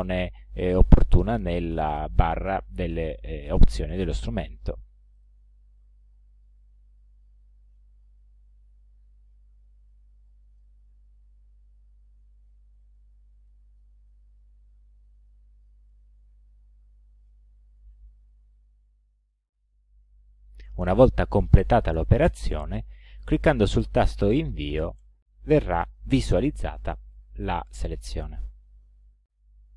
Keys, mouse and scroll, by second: 5.2 click, 6.7-8.0 drag, 9.9 click, 13.0 click, 15.3 click, 25.0 Return.